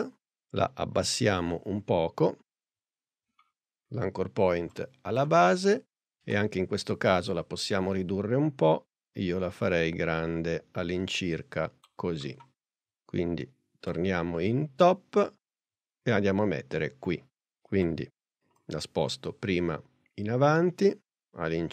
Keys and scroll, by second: 1.0 p, 5.8 s, 17.8 p.